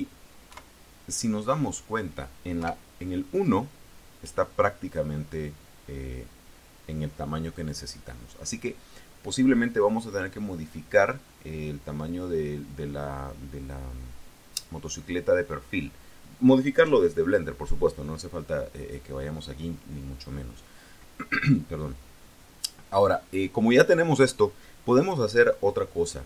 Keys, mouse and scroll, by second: 0.3 KP_3, 2.5 KP_1.